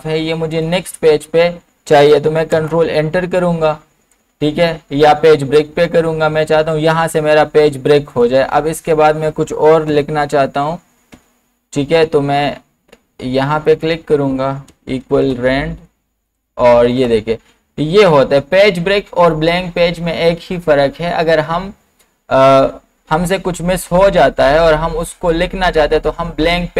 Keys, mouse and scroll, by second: 0.5 click, 2.6 ctrl+Return, 3.8-4.2 scroll down 1, 5.8 scroll up 1, 8.1 click, 9.9 =, 11.1 e, 11.2 BackSpace, 12.5 scroll up 1, 13.7 click, 14.4-16.8 typing, 16.9 Return.